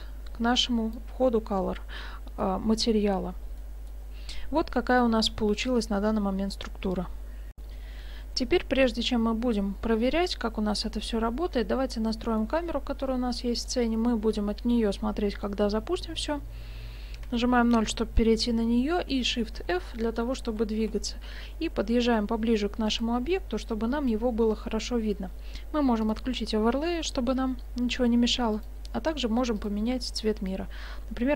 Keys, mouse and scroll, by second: 2.0 middle click, 2.9-3.7 scroll down 5, 3.6 middle click, 5.1-5.5 scroll up 1, 7.6 F9, 12.1-12.4 scroll down 1, 12.4 middle click, 12.7-13.6 scroll down 6, 13.6 right click, 13.6 scroll down 2, 17.3 KP_0, 19.3 shift+f, 26.1 click, 28.6 click, 29.6 click.